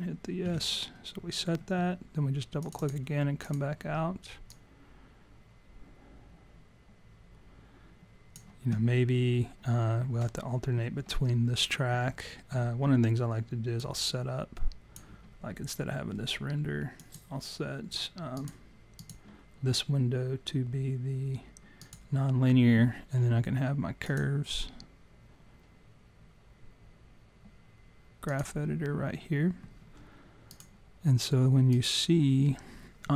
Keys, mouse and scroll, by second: 0.4 s, 1.6 scroll down 2, 2.6 click, 2.8 click, 3.4 click, 4.5 click, 13.9 click, 17.2 click, 19.2 click, 24.3 click, 30.9 click, 31.8 click.